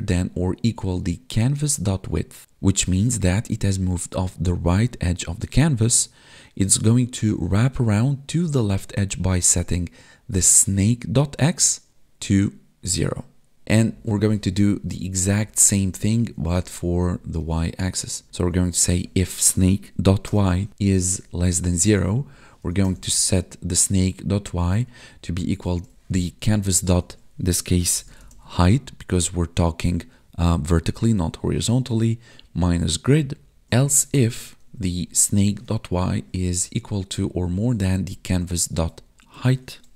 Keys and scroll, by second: 15.3 alt+shift+Down, 16.1 ctrl+s, 16.4 Up, 17.0 Down, 18.3 ctrl+Right, 20.9 Right, 21.8 Left, 22.1 Down, 24.1 Right, 26.4 Left, 26.8 ctrl+shift+Right, 33.4 Left, 33.7 Left, 36.0 Right, 38.1 Right, 39.3 ctrl+shift+Right.